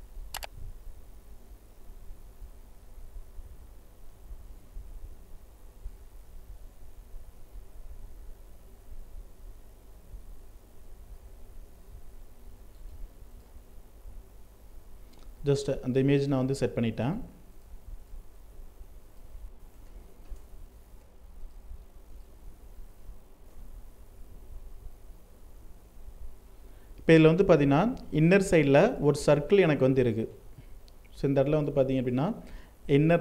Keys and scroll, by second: 3.3 ctrl+t, 19.3 ctrl+space, 27.0 ctrl+space.